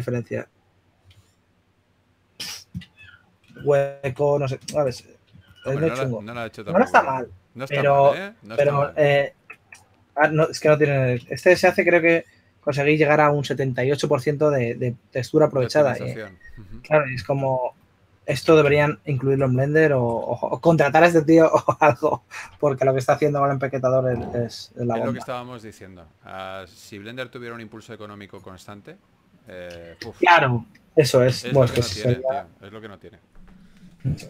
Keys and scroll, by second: 9.1 super+z, 18.5 Tab, 32.4-34.2 typing.